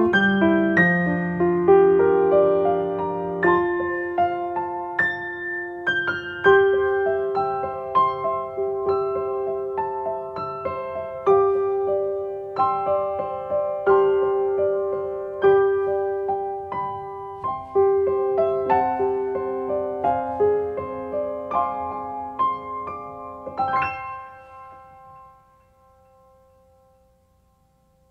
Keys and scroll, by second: 25.5 space.